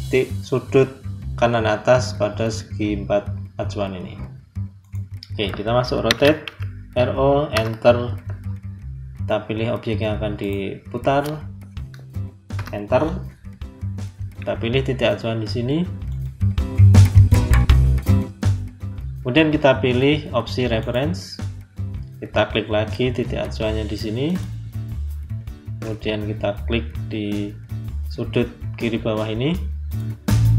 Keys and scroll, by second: 6.0 r, 6.4 o, 7.4 Return, 12.4 Return.